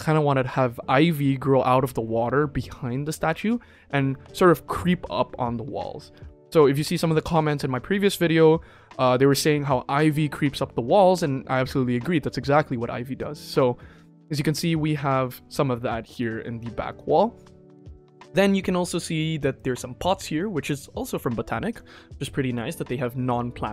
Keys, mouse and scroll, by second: 19.5 click, 21.6 click.